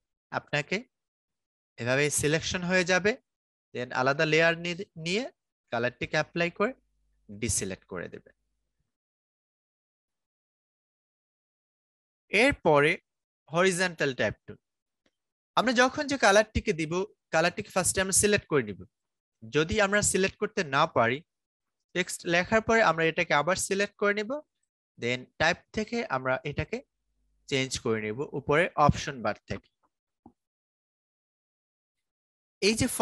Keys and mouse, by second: 0.3 click, 3.0 click, 7.0 ctrl+d, 12.1 right click, 13.3 click, 16.3 click, 18.7-26.2 drag.